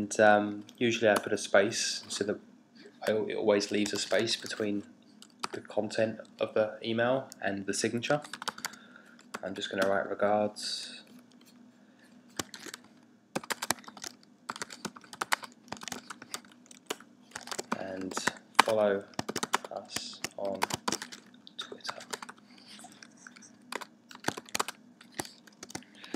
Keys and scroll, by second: 1.1 Return, 3.9 typing, 5.4 typing, 6.4-9.8 typing, 12.3-24.5 typing, 26.0-26.1 typing.